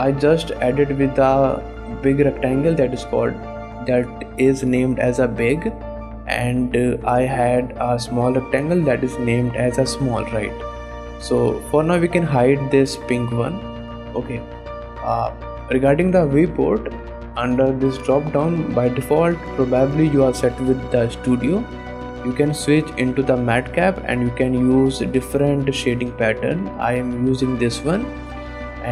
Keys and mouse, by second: 0.0 click, 0.4 shift+click, 0.9 click, 1.1 shift+click, 2.2 click, 6.2 click, 6.7 click, 7.5 g, 10.6 middle click, 11.0 shift+click, 11.8 click, 15.3 click, 16.4 click, 16.8-28.9 drag.